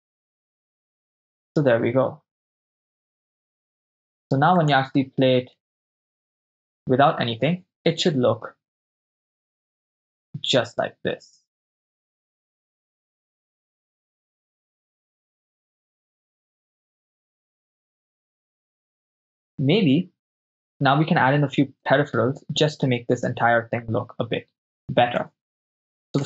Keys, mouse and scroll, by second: 3.2 shift+space, 4.8 click, 5.6 shift+space, 22.0 shift+space, 25.4 shift+space.